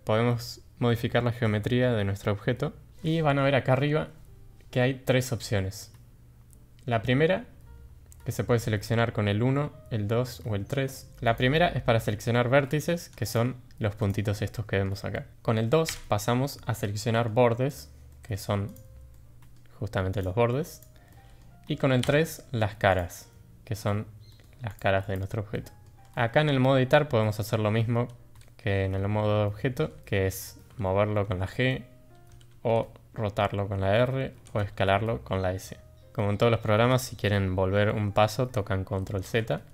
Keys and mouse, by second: 11.2 click, 12.6 middle click, 13.2 click, 14.0 click, 14.3 middle click, 15.1 middle click, 15.9 2, 16.7-17.2 middle drag, 17.7 click, 18.0 middle drag, 18.7 drag, 19.1-19.5 middle drag, 20.6 click, 21.1 middle click, 22.0 3, 22.8 click, 24.3 middle click, 24.6 click, 24.9 click, 25.5-25.8 middle drag, 26.1 middle click, 26.5 shift+middle click, 27.2 middle click, 30.4 g, 39.0 ctrl+z.